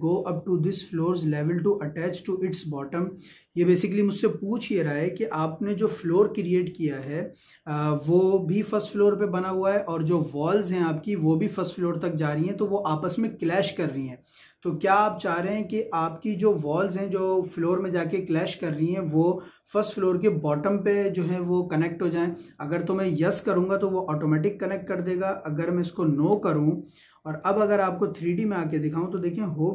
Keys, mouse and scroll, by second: 26.3 click, 29.1 shift+middle click.